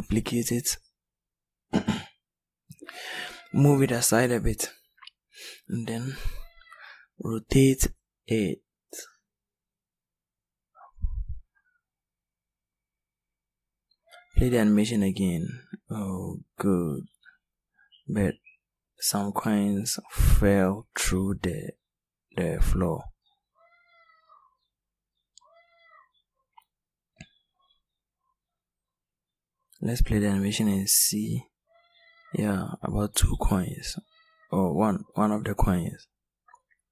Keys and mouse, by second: 4.6 r, 9.2 click.